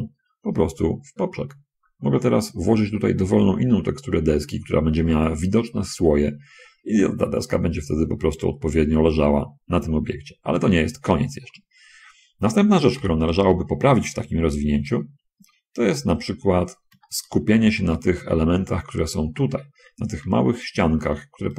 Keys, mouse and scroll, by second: 0.3-1.2 scroll up 1, 1.9-2.4 scroll down 1, 2.8 scroll down 1, 3.1 middle click, 13.3 n, 13.8 middle click, 15.6 a, 16.6 middle click, 17.3 shift+click, 20.5 3, 20.9 click.